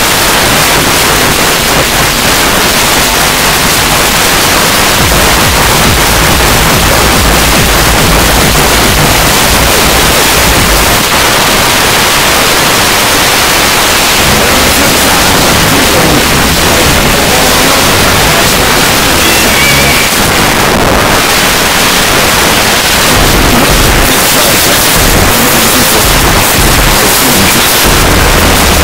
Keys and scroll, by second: 0.2 Down, 0.3 Down, 0.5 Down, 0.7 Down, 0.8 Down, 1.3 Down, 1.4 Down, 1.7 Down, 1.9 Down, 2.2 Down, 2.3 Return, 11.0 Page_Down, 20.0 Page_Down.